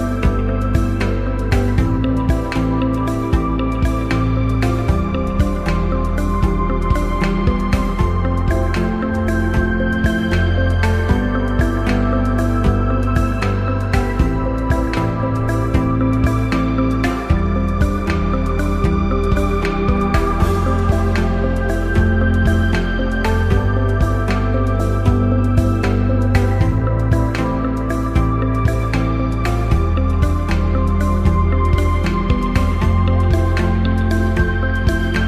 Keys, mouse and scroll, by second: 1.1 click, 3.4 click, 7.4 shift+click, 16.2 click, 25.3 click, 26.2 click, 28.9 click, 30.4 click, 35.0 shift+click.